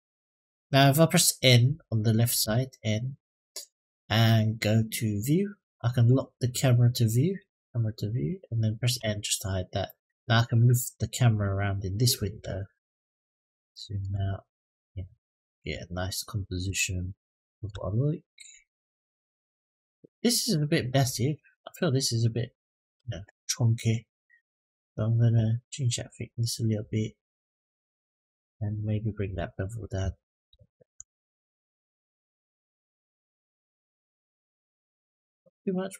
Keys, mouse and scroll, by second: 2.2 n, 5.0 click, 7.3 click, 8.7 n, 9.6-10.0 middle drag, 10.1-12.0 shift+middle drag, 12.3-13.2 scroll down 5, 13.4-13.8 shift+middle drag, 14.0-14.4 middle drag, 14.7 scroll up 2, 15.2 shift+middle drag, 15.9-16.4 scroll down 1, 16.5-17.4 shift+middle drag, 18.2 scroll up 1, 18.5 shift+scroll down 1, 19.2-19.6 scroll down 1, 19.8 click, 24.6 click, 25.7-27.8 drag, 29.1-35.9 drag.